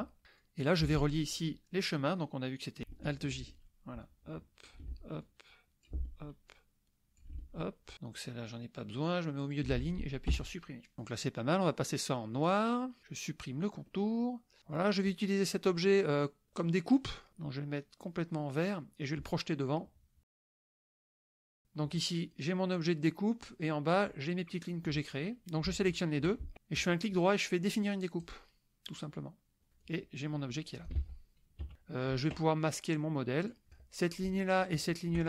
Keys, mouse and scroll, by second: 0.4-1.5 drag, 3.4 alt+j, 4.0 alt+click, 4.9 alt+j, 5.2 alt+click, 6.0 alt+j, 6.5 alt+click, 7.3 alt+j, 9.5 click, 10.3 Delete, 12.3 click, 13.8 click, 15.0 click, 18.8 click, 20.6 click, 21.6 click, 22.2 click, 22.9 click, 24.0 click, 25.9 shift+click, 26.8 right click, 28.2 click, 29.8-31.0 drag, 31.0 ctrl+z, 31.6 KP_Subtract, 31.7 click, 33.4 click, 34.7 shift+click.